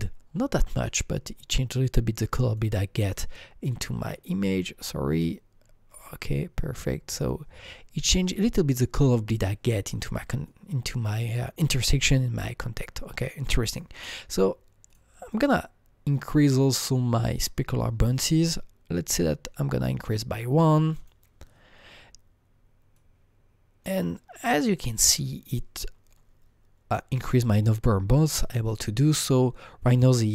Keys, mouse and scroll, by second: 0.5-1.3 scroll down 3, 2.4 click, 2.6 click, 3.1-4.6 drag, 4.2-5.1 scroll down 6, 5.1 click, 5.6-6.3 scroll up 6, 7.2-12.3 drag, 12.4-13.3 scroll down 5, 13.7 click, 15.2 click, 15.3 click, 18.4 click, 20.9 click, 22.9-25.8 drag, 25.8-27.2 scroll up 3, 27.2-27.9 scroll up 3.